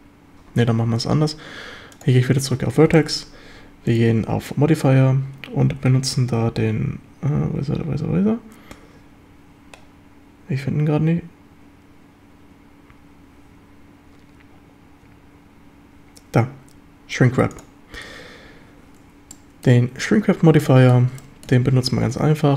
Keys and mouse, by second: 0.2 middle click, 0.3 click, 2.9 middle drag, 4.0-17.6 drag, 19.3-19.6 middle drag, 20.6 middle click, 21.2 shift+middle drag.